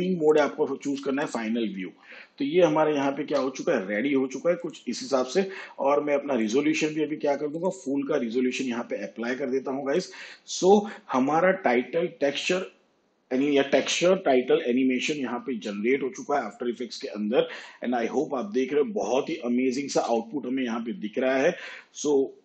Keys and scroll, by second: 3.2 shift+/, 20.0 space.